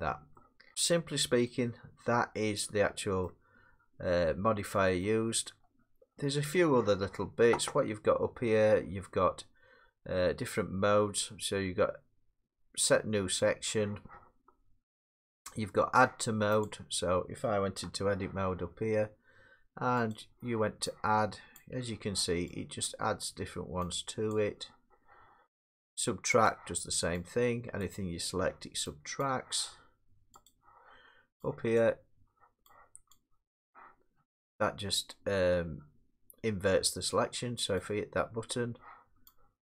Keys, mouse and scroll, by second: 0.0 middle click, 0.3 middle click, 0.7 middle click, 1.4 middle click, 3.2 middle click, 4.5 middle click, 5.0 middle click, 5.6 middle click, 5.9 middle click, 6.4 middle click, 6.4-7.1 scroll, 16.6 click, 17.8 Tab, 20.1 click, 21.6 click, 22.8 click, 24.3 click, 26.5 click, 27.8 click, 29.2 click, 30.5 click, 31.8 click, 33.1 click, 37.8 click.